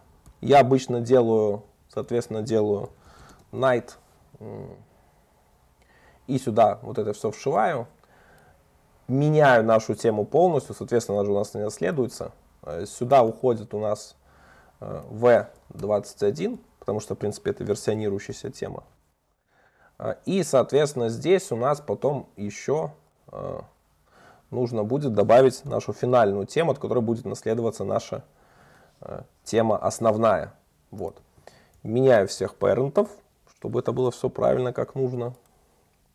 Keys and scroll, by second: 4.2 Escape, 10.7 super+d, 19.0 alt+super+l, 27.0 super+d, 31.3 alt+Up, 31.8 super+c, 32.4 alt+Up, 33.1 super+v, 34.2 alt+super+l, 34.9 Escape.